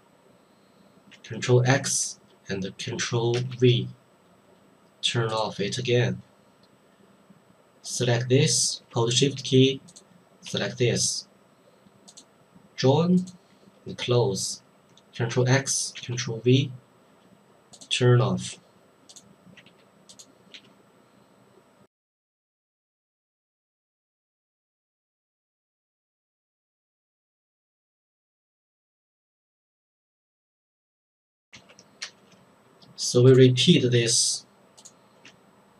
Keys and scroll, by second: 1.6 ctrl+x, 3.3 ctrl+v, 15.3 ctrl+x, 16.0 ctrl+v, 24.7 ctrl+x, 24.9 ctrl+v, 26.9 ctrl+x, 27.1 ctrl+v, 29.1 ctrl+x, 29.4 ctrl+v, 31.5 ctrl+x, 32.0 ctrl+v.